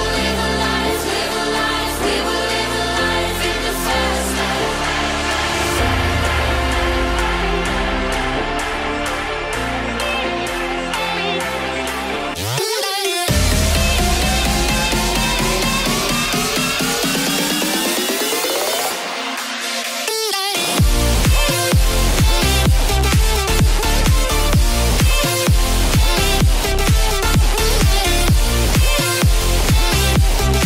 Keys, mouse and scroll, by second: 0.8 click, 1.5 click, 1.9 KP_1, 2.9 click, 3.2 click, 4.0 click, 5.1 click, 6.7 Delete, 8.6 click, 9.1 click, 10.3 click, 11.8 click, 12.4 middle click, 15.2 click, 16.5 KP_3, 17.2 shift+z, 18.1 click, 18.9 Delete.